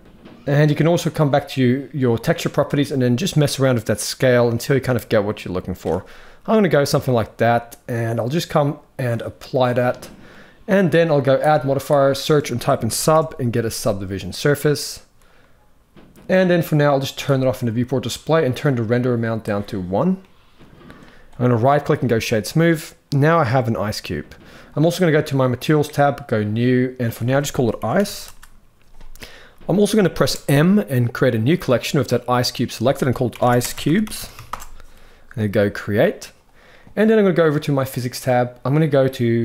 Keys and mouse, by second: 1.0 click, 2.6-5.5 shift+drag, 5.8-6.8 middle drag, 9.0 click, 10.0 middle click, 11.3-14.0 drag, 16.9-18.0 drag, 19.9 middle click, 21.3-21.8 right drag, 22.2-23.4 middle drag, 25.4 click, 26.2 click, 26.9-28.0 drag, 30.1 m, 37.7 click.